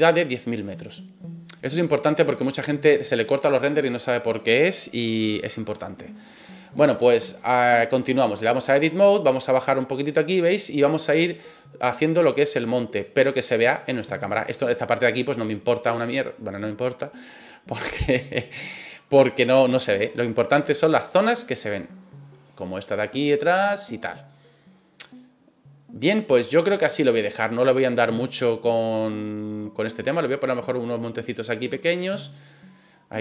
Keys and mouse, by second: 6.5 right click, 7.8-8.4 drag, 9.3 click, 11.4 right click, 12.0-13.0 drag, 14.9 right click, 15.3-18.1 drag, 20.6 right click, 21.2 right click, 21.8-23.9 drag, 24.7 right click, 25.2-27.3 drag, 28.1 middle click, 28.6 right click, 29.2 click.